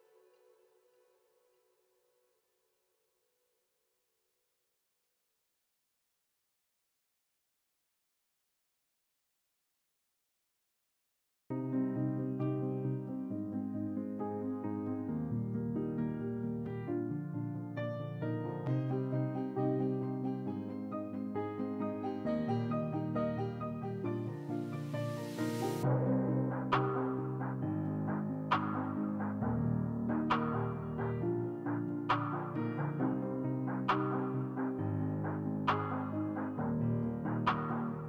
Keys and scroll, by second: 4.1 x, 4.9 s, 33.0 s, 35.7 s, 36.5 s.